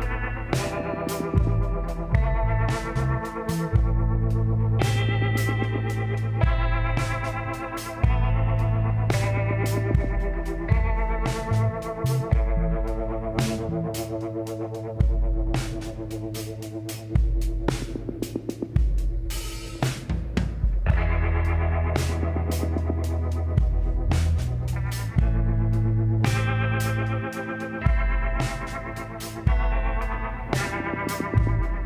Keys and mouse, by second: 0.8-2.9 drag, 3.6-6.0 middle drag, 6.1-8.3 drag, 7.8 s, 10.3 click, 11.4 KP_1, 12.1 click, 12.5 KP_3, 14.1 r, 17.4 s, 19.5-21.0 drag, 21.4-23.4 drag, 23.4 middle click, 23.8-26.9 drag, 27.8-31.8 drag.